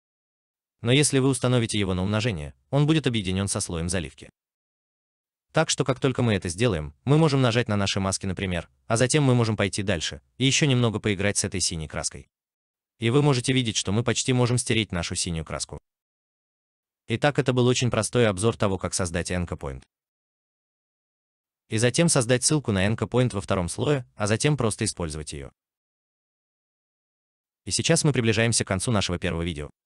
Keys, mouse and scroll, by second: 16.8 alt+right click, 17.9 alt+middle click, 29.0 alt+right click.